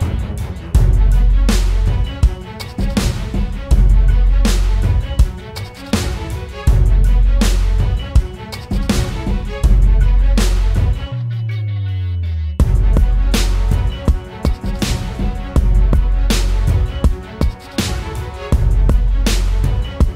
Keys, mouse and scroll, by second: 12.5 double click.